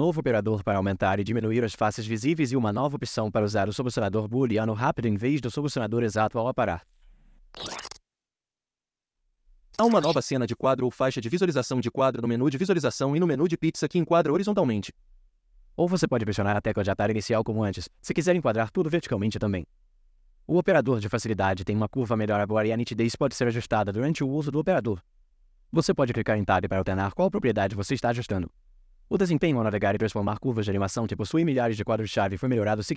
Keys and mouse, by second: 32.5 5.